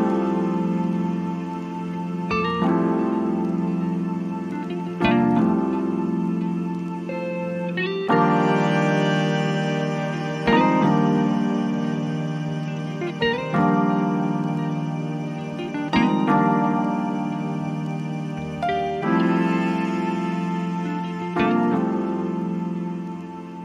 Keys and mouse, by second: 4.3 click, 6.8-19.8 drag, 21.1 click.